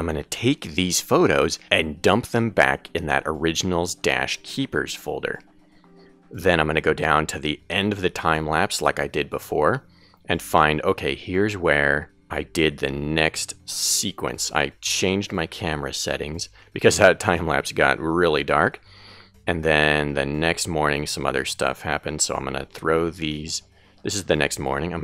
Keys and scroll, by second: 14.7 Left, 19.4 Right.